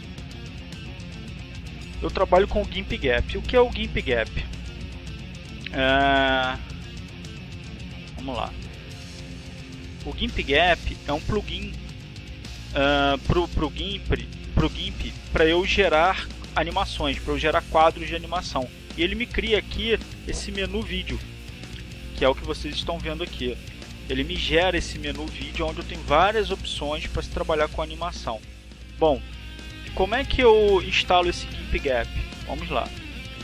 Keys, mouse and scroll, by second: 5.2-6.2 drag, 6.3-7.8 drag, 7.8-10.0 drag, 10.3 click, 11.2 click, 18.2-19.3 drag, 28.7 click, 32.1 click.